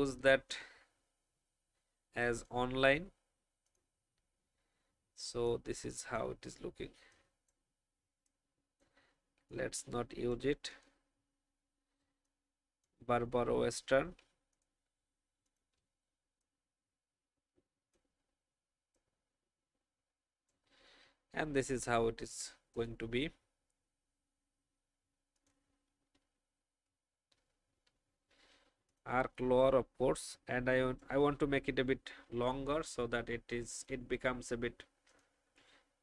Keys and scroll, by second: 5.5 space.